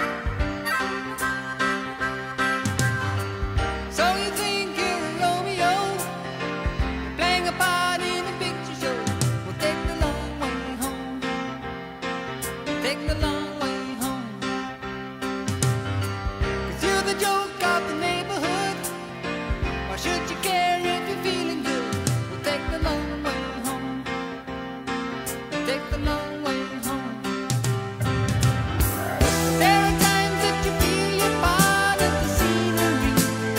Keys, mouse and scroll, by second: 8.0-8.8 middle drag, 8.9 right click, 12.3-13.2 right drag, 14.2-15.4 right drag, 14.3 click, 15.0 click, 15.8-16.9 right drag, 17.6-27.1 right drag, 17.8 click, 17.8 middle click, 19.7-27.1 drag, 19.7-30.4 middle drag, 30.4-32.2 drag, 32.2-33.5 middle drag.